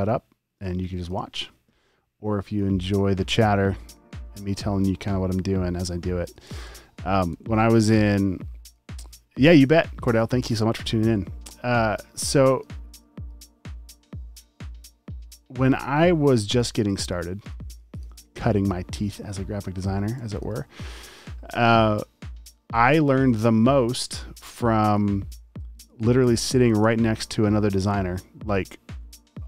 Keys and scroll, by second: 0.7-2.0 typing, 6.7 v, 6.8 space, 7.3 v, 16.8 space, 17.7 space, 17.9 space, 18.1 space, 20.0 space, 20.5 alt+super+space, 21.3 typing, 22.8 typing, 24.1 super+x, 24.5 v, 26.2 space, 26.9 a.